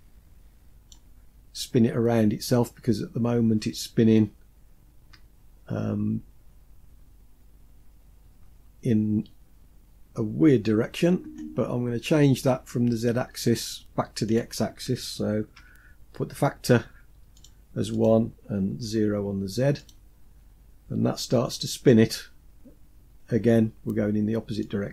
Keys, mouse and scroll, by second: 3.0-3.9 scroll up 3, 13.8-17.0 drag, 17.5-19.4 drag, 20.4 scroll down 2, 22.6-23.6 scroll down 1, 24.1-24.9 drag.